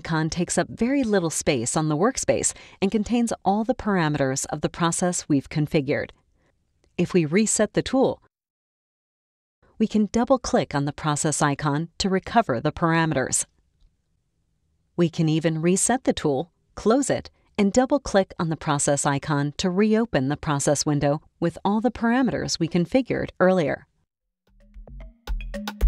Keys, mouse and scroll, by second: 0.2-2.1 drag, 7.3 click, 10.2 click, 15.8 click, 17.6 click, 20.1 click, 23.1 click.